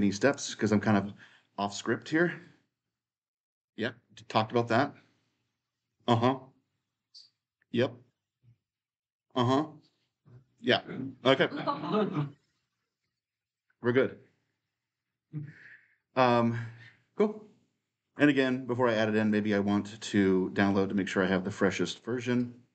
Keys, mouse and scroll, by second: 0.0-2.0 drag, 5.0-11.6 middle drag, 5.0-5.8 scroll down 2, 5.8-6.8 scroll down 1, 6.8-8.3 scroll down 1, 8.3-9.6 scroll down 1, 9.6-11.2 scroll down 1, 11.2-11.6 scroll down 1, 13.2-15.3 drag, 17.9-20.0 right drag, 20.7 right click.